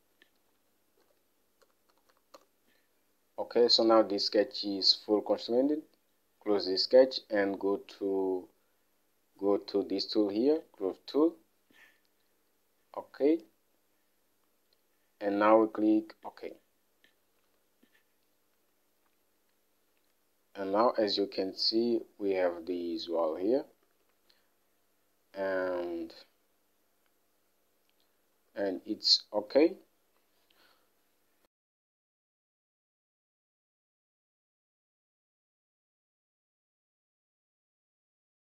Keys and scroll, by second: 1.1-3.0 typing, 5.0-5.8 typing, 17.8 Home, 24.3 alt+Tab, 29.1 alt+Tab.